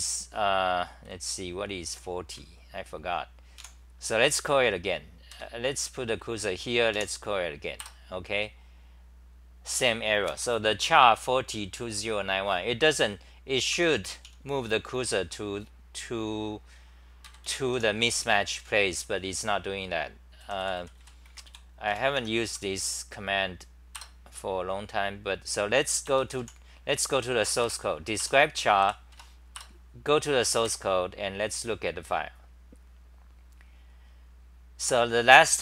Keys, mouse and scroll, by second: 1.1-2.5 c, 4.1 a, 5.4 ctrl+g, 5.8-7.1 typing, 7.8 Return, 13.7 ctrl+g, 14.2-15.0 typing, 17.3 ctrl+g, 17.5 n, 17.7 h, 20.2-22.5 typing, 22.2 End, 24.0 Return, 27.6 Up, 28.3 Return, 28.8 w, 29.1 Tab, 30.0 Return, 30.7 3, 33.4-35.1 scroll down 9, 35.1-35.6 scroll down 1.